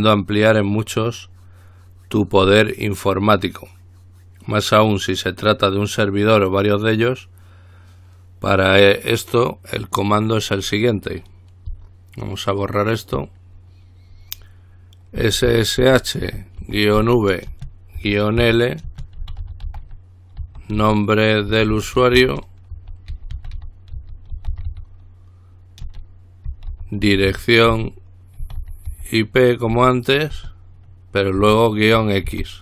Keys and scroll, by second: 15.2-17.2 typing, 18.2-25.4 typing, 26.5-29.9 typing, 31.6-32.5 typing.